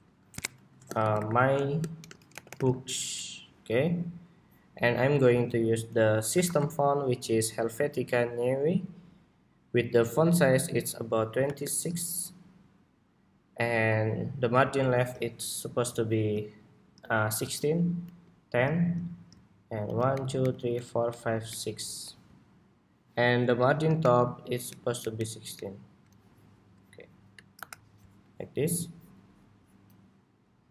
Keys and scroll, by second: 3.0 Escape, 3.2 ↺, 17.7 alt+shift+Right, 19.5 alt+Right, 20.2 alt+Right, 20.5 alt+Right, 20.8 alt+Right, 21.2 alt+Right, 23.7 alt+shift+Up, 24.4 alt+Down, 24.7 alt+Up, 25.3 alt+Up, 27.3 super+-.